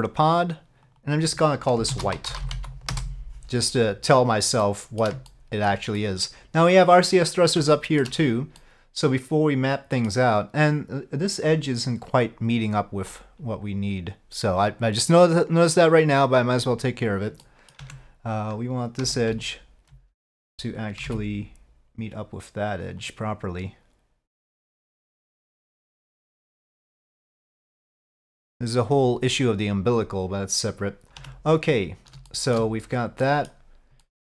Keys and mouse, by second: 0.3 click, 0.9 click, 1.1-3.6 drag, 4.7-5.1 middle drag, 5.4-5.8 shift+middle drag, 6.1 middle drag, 7.8 shift+middle drag, 8.6-10.2 middle drag, 11.3 click, 17.5 middle click, 17.9 Tab, 19.1 2, 19.5 alt+click, 25.4-28.1 drag, 31.3 Tab, 32.4 shift+middle drag, 33.3 middle click, 34.1-34.2 middle drag.